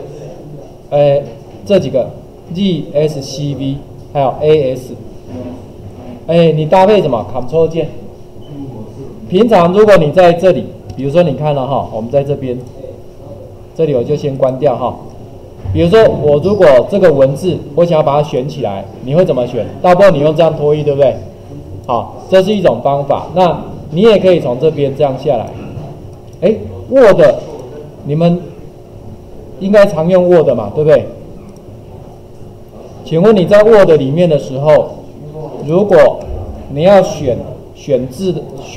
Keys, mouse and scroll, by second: 0.5-4.9 typing, 11.8 Tab, 18.4-19.5 drag, 20.1 click, 22.4 click, 24.2 click, 24.4-25.4 drag, 26.1 click, 26.2 click.